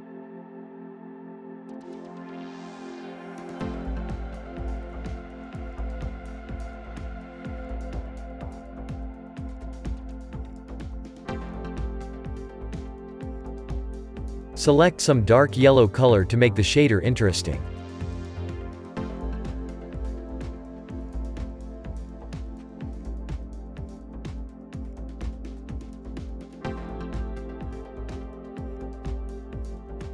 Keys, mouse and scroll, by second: 9.6-10.8 drag, 14.0 click, 26.6-29.5 shift+middle drag.